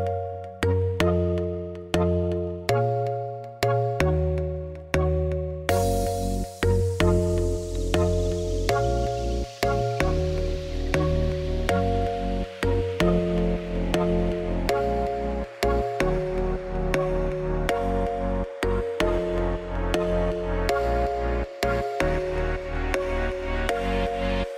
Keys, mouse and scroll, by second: 0.0 Tab, 0.8 middle click, 1.1 scroll down 1, 1.2 Tab, 1.4-2.9 right drag, 2.9 1, 2.9 click, 3.9 g, 5.2 click, 5.3 g, 5.7 click, 6.5 click, 7.3 g, 7.9 click, 8.0 g, 8.5 click, 8.6 g, 9.3 Tab, 9.4 right click, 9.8 middle click, 10.3-10.9 scroll up 1, 10.9 r, 11.7 alt+d, 13.2 r, 13.7 g, 14.3 alt+d, 14.7 r, 15.5 alt+d, 16.2 r, 17.6-18.1 scroll down 1, 18.1-19.3 middle drag, 19.4 shift+click, 19.8 shift+click, 20.1 middle click, 20.3 g, 21.1 click, 21.2 Tab, 21.4 3, 21.5 click, 21.7 g, 22.9 Tab, 23.0 scroll down 1, 23.2 middle click, 23.4-23.8 scroll up 2, 23.8 click, 24.0-24.3 scroll up 1, 24.3 shift+middle click.